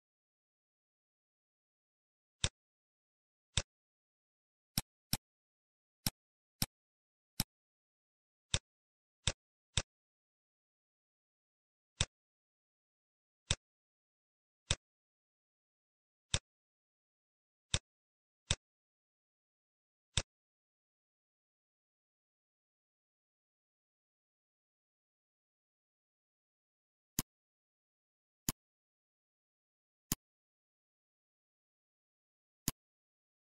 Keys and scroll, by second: 7.8 shift+d.